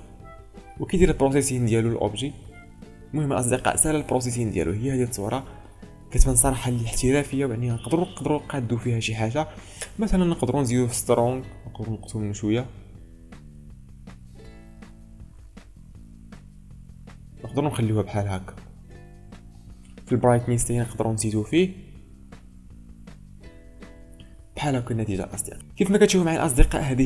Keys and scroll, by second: 4.0 ctrl+space, 6.1 ctrl+space, 7.7 ctrl+space, 25.5 ctrl+space.